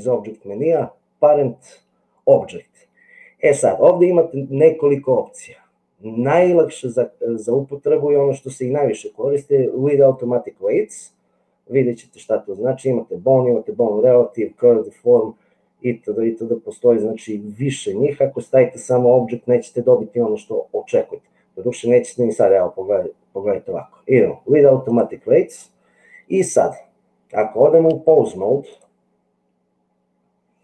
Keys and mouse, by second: 28.7-30.6 drag.